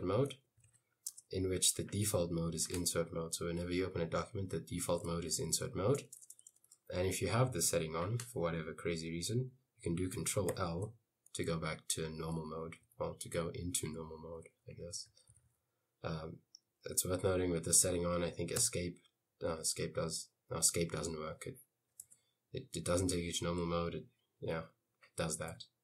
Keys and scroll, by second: 0.0-1.2 typing, 5.1-6.3 typing, 10.6 ctrl+l, 11.6 ctrl+l, 11.7 k, 12.1 k, 12.9 k, 14.0-16.2 typing, 18.8 Escape, 19.6 j, 22.2 Escape, 25.6 u.